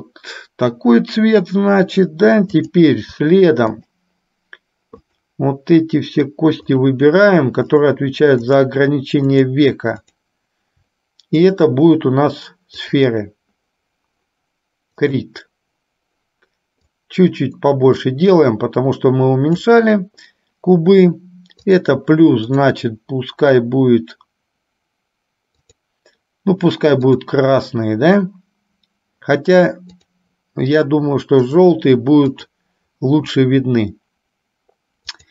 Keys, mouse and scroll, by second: 2.8 click, 3.9 shift+click, 5.3 shift+click, 7.0 shift+click, 8.1 shift+click, 8.6 shift+click, 9.5 shift+click, 10.1 shift+click, 11.8-13.3 drag, 15.1 click, 16.9-19.9 drag, 21.6 click, 22.5-26.1 drag, 27.5 click, 30.0-32.0 drag, 32.6 click, 35.1 click.